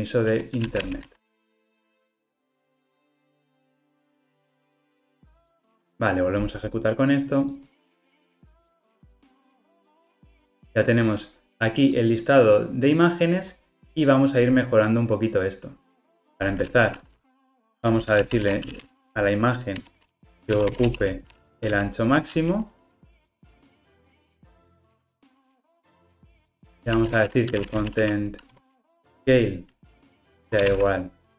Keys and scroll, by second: 4.3 Return, 4.5 ctrl+r, 4.9 alt+super+[, 19.8 Return, 30.0 Return.